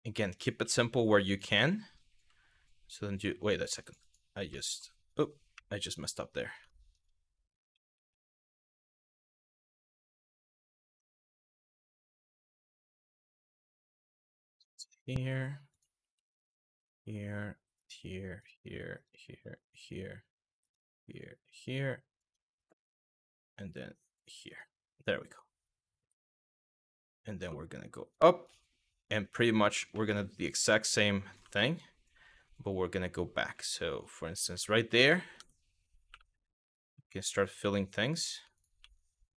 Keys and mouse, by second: 0.0 click, 0.9 click, 1.3 middle click, 3.4 click, 4.3 middle click, 5.2 KP_1, 6.4 shift+middle click, 7.3 ctrl+z, 7.6 ctrl+z, 10.1 e, 11.8 g, 14.2 click, 14.3 g, 15.3 click, 15.6 e, 16.4 click, 17.4 click, 18.0 click, 18.7 click, 19.3 click, 20.2 click, 21.2 click, 24.1 click, 26.2 shift+middle click, 27.3 e, 28.1 click, 28.4 e, 29.2 click, 29.5 middle click, 30.9 click, 31.2 middle click, 34.2 Tab, 34.6 middle drag, 35.0 Tab, 35.7 2, 36.3 click, 37.2 f, 38.2 shift+click, 38.4 f, 39.0 click.